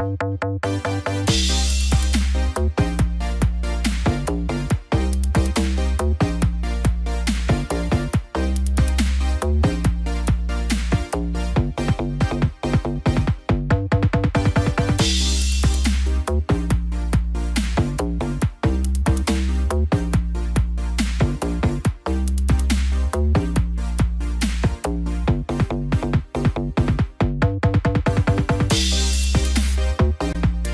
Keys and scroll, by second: 1.2 ctrl+0, 28.6 ctrl+g.